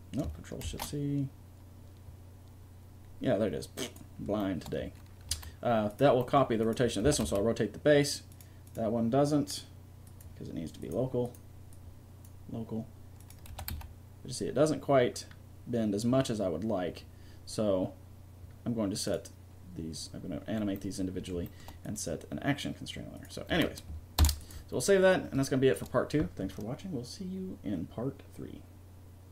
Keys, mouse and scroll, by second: 0.6 ctrl+shift+c, 5.3 a, 6.2-8.8 drag, 7.0 r, 13.5 r, 14.2 middle click, 20.7-21.8 middle drag, 21.8-23.6 drag, 23.1 right click, 23.5 a, 24.1 ctrl+s.